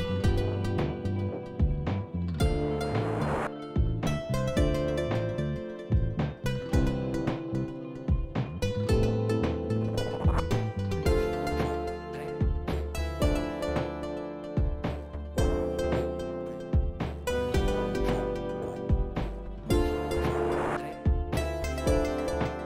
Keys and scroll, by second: 3.7 f, 9.5 f, 9.5 F4, 11.2 shift+s, 11.6 shift+s, 11.8 shift+s, 12.9 shift+s, 14.1 shift+s, 14.9 shift+s, 15.1 shift+s, 15.4 shift+s, 18.8 shift+s, 19.3 shift+s, 19.9 shift+s.